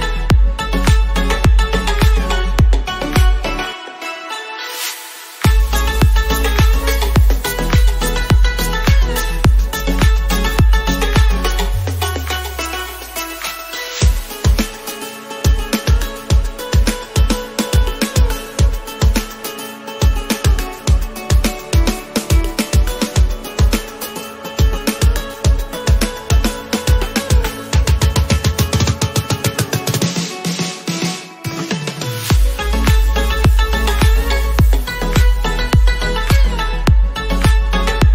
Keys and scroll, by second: 1.2 ctrl+x, 6.9 ctrl+z, 13.5 ctrl++.